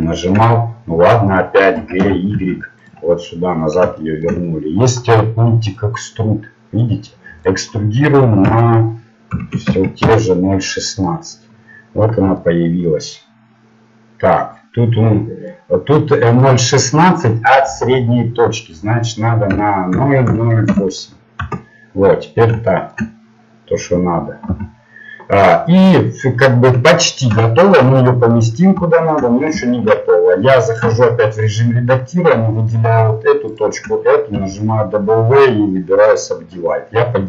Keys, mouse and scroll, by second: 1.8 g, 3.4-5.9 middle drag, 5.9-10.0 drag, 11.2 middle click, 21.4 KP_0, 22.7 middle click, 24.5 g, 26.2-27.4 middle drag, 30.8 ctrl+Tab, 36.0 w, 36.6 middle click.